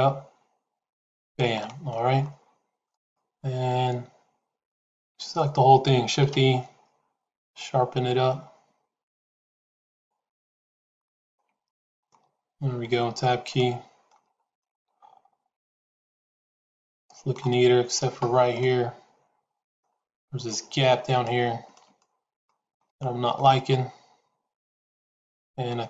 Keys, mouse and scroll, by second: 1.4 middle click, 2.8 click, 5.0 a, 6.1 shift+e, 10.8 shift+middle click, 11.6 middle click, 12.9 Tab, 13.4 middle click, 14.5-17.3 middle drag, 18.5-19.7 middle drag, 20.0 Tab, 21.1 shift+middle click, 21.9 middle click, 22.8 shift+middle click, 24.6 click.